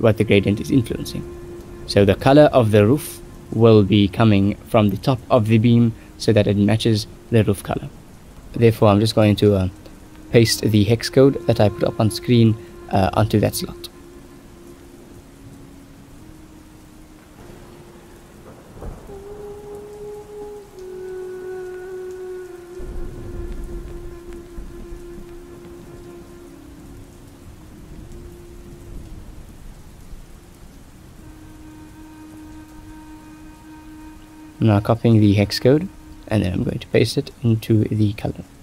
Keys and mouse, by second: 3.7 shift+middle click, 5.3 shift+middle click, 5.9-7.0 middle drag, 7.0-7.8 drag, 8.8 click, 10.3 click, 12.1-12.7 drag, 14.5 click, 15.8 click, 17.1 click, 21.3 middle click, 21.8-24.5 drag, 25.0 middle click, 25.5 ctrl+shift+click, 26.0 ctrl+s, 26.2 shift+middle click, 27.5 shift+middle click, 28.4 middle click, 32.4 ctrl+s, 36.1 middle click.